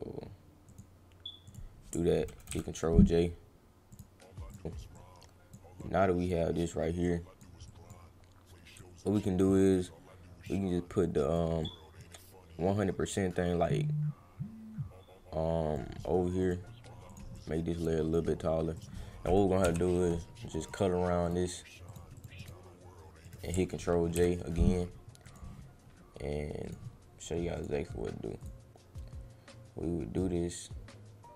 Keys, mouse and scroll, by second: 0.6 click, 1.5 click, 3.9 click, 4.5 click, 4.9 click, 5.8 click, 7.0 click, 7.7 click, 8.8 click, 9.5 click, 11.0 click, 11.6-15.7 drag, 16.4 click, 17.1 click, 17.3 click, 18.7 click, 20.6 click, 21.2 click, 21.9 click, 22.2 click, 22.4 click, 23.2 click, 25.2 click, 26.6 click, 27.5 click, 28.4 click, 30.2-31.3 drag.